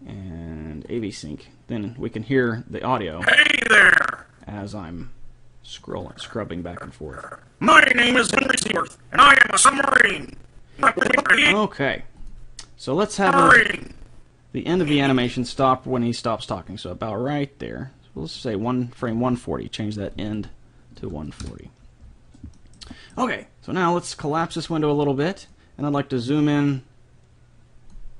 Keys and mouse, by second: 3.2-5.0 drag, 5.8-7.7 drag, 12.2-15.0 drag, 19.0-20.8 drag, 22.6-24.1 middle drag, 24.3 click, 24.3 middle click, 24.5 click, 24.5 middle click, 24.7-26.0 drag, 24.7 middle click, 26.4-28.1 drag.